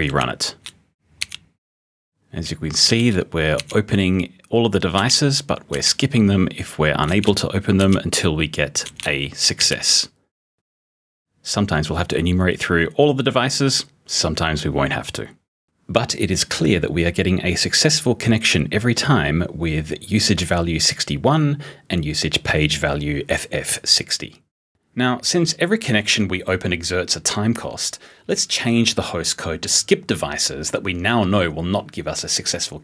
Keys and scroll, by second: 1.1 r, 2.8 b, 3.5 r, 4.9 b, 5.6 r, 7.0 b, 7.7 r, 8.8 b, 9.5 r.